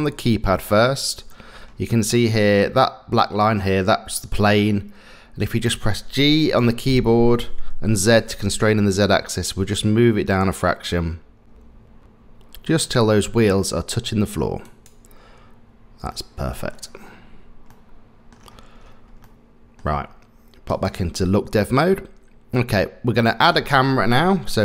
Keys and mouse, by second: 6.6 g, 17.7-18.3 middle drag, 19.3-19.8 middle drag, 20.7 click, 21.8-23.4 middle drag.